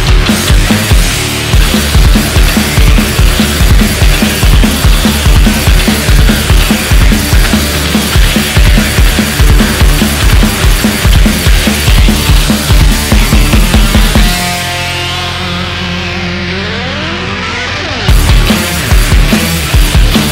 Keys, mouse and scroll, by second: 0.3 click, 2.3 click, 3.1 KP_1, 4.0 click, 5.4 scroll down 2, 5.6-7.7 middle drag, 7.7 KP_1, 7.9-8.3 scroll down 1, 8.3-10.6 shift+middle drag, 10.6 scroll up 1, 10.8 KP_1, 11.3-11.9 shift+middle drag, 11.9-12.4 scroll up 1, 12.4 Tab, 13.2 alt+click, 13.9 click, 15.6-16.2 scroll down 1, 16.2 Tab, 16.6-17.0 scroll down 1, 17.0-20.1 shift+middle drag.